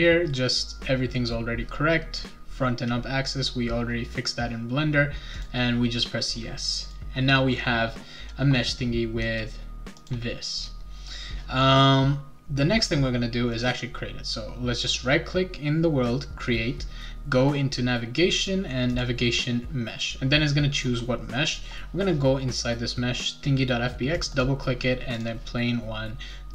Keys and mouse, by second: 5.3 click, 6.8 click, 10.0 click, 13.5 right click, 18.9 click, 21.5 click, 24.1 click, 24.3 click, 25.1 click.